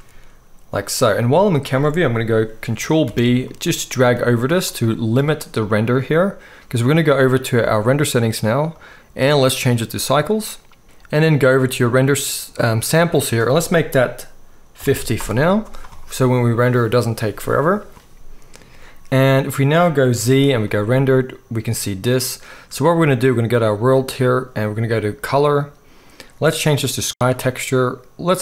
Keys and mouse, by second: 3.0 ctrl+b, 7.9-8.8 drag, 9.1-23.2 middle drag, 20.2 z, 23.6-25.3 drag.